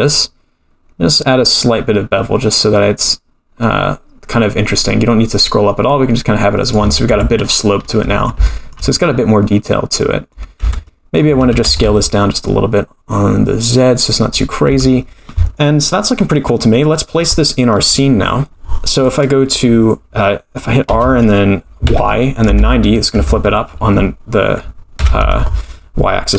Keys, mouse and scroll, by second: 7.0 Tab, 7.3-8.4 scroll down 12, 8.4 shift+middle click, 8.9-10.3 middle drag, 10.6 Tab, 10.8 middle click, 11.4 a, 11.6 s, 14.6 Tab, 16.1-16.8 scroll down 2, 16.8-17.7 middle drag, 20.9 r, 25.0 KP_2.